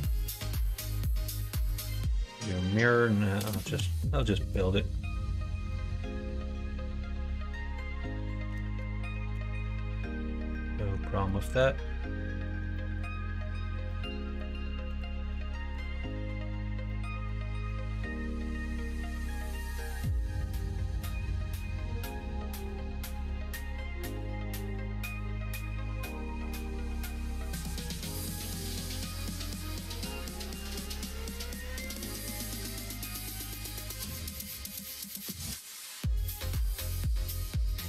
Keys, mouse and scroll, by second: 0.2 middle click, 0.5-1.8 middle drag, 2.3 middle click, 3.5 click, 5.7-8.5 middle drag, 9.3 f, 10.5 middle click, 11.2 middle click, 12.7 middle click, 13.8 middle click, 14.9 click, 15.7 shift+click, 16.5 f, 16.8 middle click, 17.6 middle click, 18.2 middle click, 18.7 shift+middle click, 19.3 middle click, 20.2 1, 20.5 click, 22.5 m, 23.4 middle click, 24.2 click, 25.5 m, 26.5 click, 26.8 click, 27.7 m, 28.4 middle click, 29.0 middle click, 29.9 click, 31.7 2, 33.5 f, 34.7 middle click, 35.2 click, 35.9 3, 36.1 click, 36.3 middle click, 37.6 i.